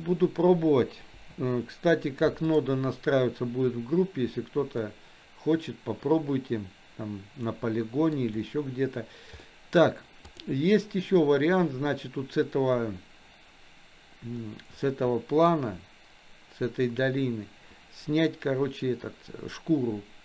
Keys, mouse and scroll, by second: 1.4 Delete, 2.4 click, 4.9-8.1 middle drag, 9.4-9.8 middle drag, 10.3 click, 14.8 middle click.